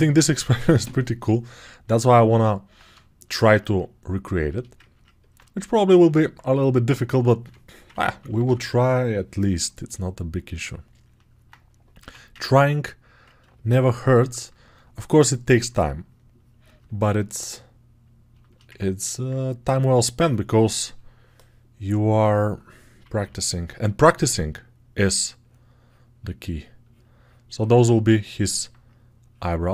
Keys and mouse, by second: 4.9-12.2 alt+right drag, 7.3 2, 7.8 [, 8.1 [, 12.2-16.6 ctrl+drag, 16.6-18.3 ctrl+alt+right drag, 18.3 alt+shift+click, 18.3 alt+shift+right click, 18.5 alt+click, 18.5-20.1 ctrl+alt+right drag, 20.1-22.3 drag, 20.1 2, 22.3-25.0 middle drag, 23.0 [, 23.1 [, 25.0-29.7 drag.